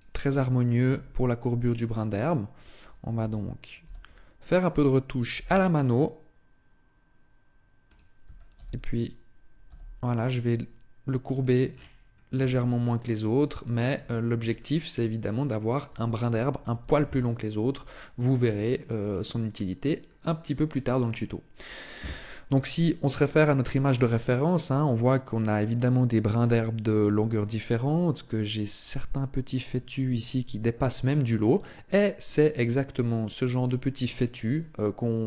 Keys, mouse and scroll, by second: 1.7 click, 2.0 shift+middle click, 2.9 a, 3.6 b, 5.5 g, 7.7 click, 8.0 a, 8.3 b, 9.4 g, 11.1 click, 11.5-12.1 scroll down 2, 12.1 Tab, 12.1-12.6 scroll down 2, 12.6 middle click, 13.9 shift+middle click, 14.3 middle click, 16.5 z, 17.7 shift+middle click, 18.7-19.1 scroll up 2, 19.1 middle click, 20.6 middle click.